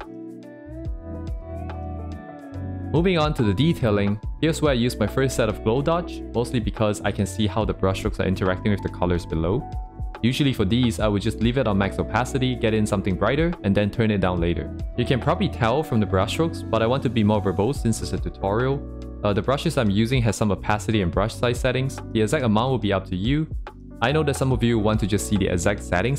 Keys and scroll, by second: 0.6 ctrl+z, 1.4 ctrl+z, 4.1 ctrl+z, 12.1 ctrl+z, 17.6 ctrl+z.